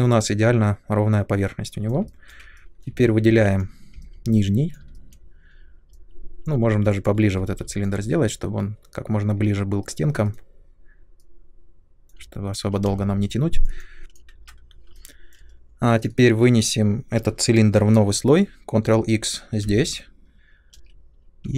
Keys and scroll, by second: 3.2 3, 7.3 r, 12.8 space, 14.3 ctrl+z, 19.6 ctrl+x, 20.7 n.